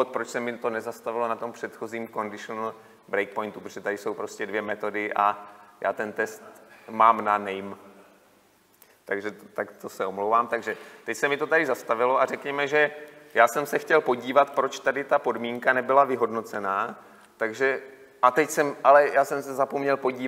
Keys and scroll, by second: 16.6 F8.